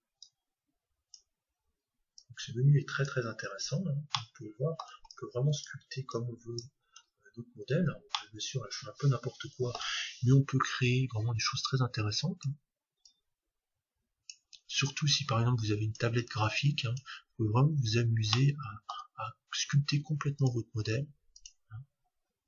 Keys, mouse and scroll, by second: 2.2-3.9 drag, 3.7-6.1 middle drag, 5.1-8.0 drag, 7.1 middle click, 7.9-8.3 scroll down 1, 8.3-10.1 middle drag, 10.8 middle click, 11.7-14.9 drag, 15.1-18.5 drag, 17.8-20.4 middle drag, 20.4-22.3 drag.